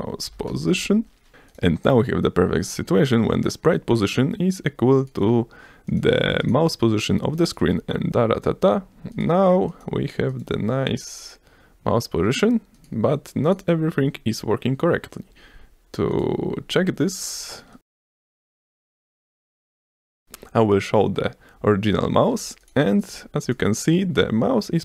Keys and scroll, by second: 0.8 Return, 5.7 F5, 18.5 shift+3, 18.9 ctrl+s, 19.7 s.